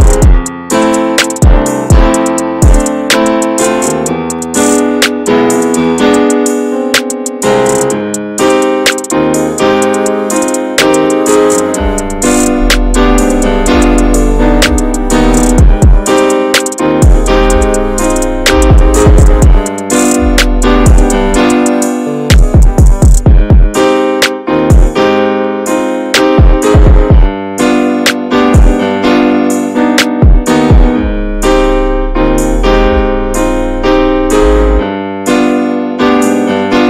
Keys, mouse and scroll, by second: 0.5-2.1 scroll down 2, 2.5-2.9 shift+middle drag, 2.9 scroll up 1, 3.1-4.3 middle drag, 4.3 scroll up 1, 4.5 alt+z, 5.0-8.2 middle drag, 8.2 click, 8.6 click, 9.0 alt+z, 9.3 click, 9.7-10.9 shift+middle drag, 10.9-11.3 scroll up 3, 11.3 middle click, 11.7 scroll up 2, 11.9-12.5 shift+middle drag, 12.5-13.0 scroll down 3, 13.1 middle click, 13.4-13.8 scroll down 5, 13.8-14.4 middle drag, 14.4 scroll up 1, 14.7 ctrl+s, 14.8 click, 15.7 ctrl+a, 16.0 drag, 16.7-17.1 middle drag, 17.1 ctrl+s, 17.2 drag, 17.6-18.2 shift+middle drag, 18.2 shift+d, 19.1-20.5 middle drag, 20.5 click, 22.6 ctrl+z, 23.1 shift+middle click, 24.0 s, 26.5 click, 26.8-27.7 middle drag, 27.7 drag, 28.7 click, 30.6 click, 31.2-31.6 alt+middle drag, 31.6-31.9 scroll up 3, 31.9-32.4 shift+middle drag, 32.4-34.1 shift+scroll up 3, 32.5 drag, 33.1-33.4 shift+middle drag, 34.3 click, 34.9 drag, 36.5 ctrl+j.